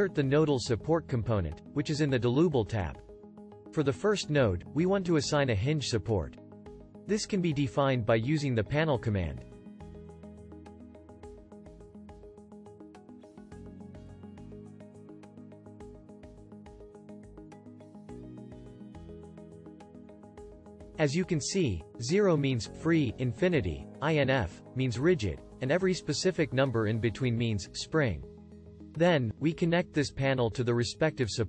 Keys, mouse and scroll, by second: 13.5 click.